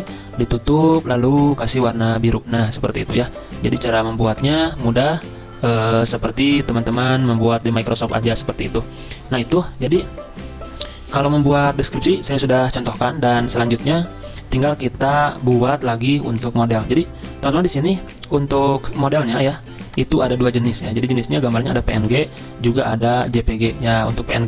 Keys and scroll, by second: 22.2 ctrl+a.